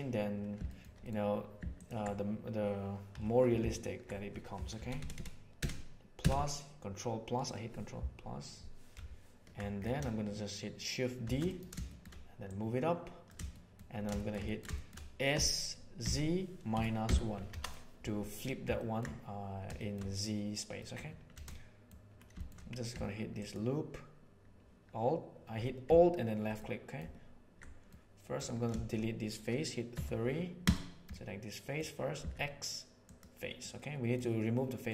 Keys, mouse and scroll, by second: 0.7 shift+middle click, 3.1 2, 3.6 alt+middle click, 4.7 ctrl+KP_Add, 4.9 ctrl+KP_Add, 5.1 ctrl+KP_Add, 5.5 ctrl+KP_Add, 6.1 ctrl+KP_Add, 11.3 shift+d, 11.8 shift+middle click, 12.5 click, 13.5 shift+middle click, 14.1 shift+middle click, 14.7 shift+middle click, 15.3 s, 18.7 ctrl+middle click, 19.8 shift+middle click, 20.6 middle click, 21.4 middle click, 22.3 shift+middle click, 23.3 alt+middle click, 26.5 middle click, 27.9 middle click, 29.9 3, 31.1 middle click, 32.1 x, 33.5 middle click, 34.5 middle click.